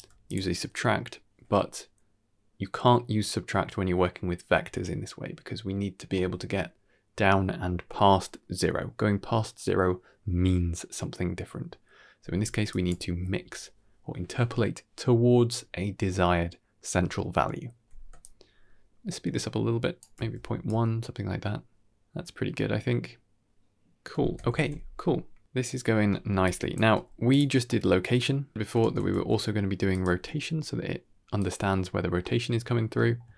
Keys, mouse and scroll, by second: 0.0 ctrl+z, 0.0 alt+right click, 0.0 shift+d, 12.3 drag, 12.7 x, 17.8-19.6 shift+drag, 20.3 g, 23.4 ctrl+shift+space, 23.5 ctrl+s, 24.0-24.4 scroll down 2, 24.2-24.8 middle drag, 25.6 scroll down 1, 25.7 middle click, 26.1 drag, 26.6 g, 27.3 middle drag, 28.4 g, 28.9 shift+space, 29.0 g, 30.1 r, 31.8-32.1 scroll up 2, 32.1 middle click, 32.6-32.9 scroll down 2, 32.8 middle click.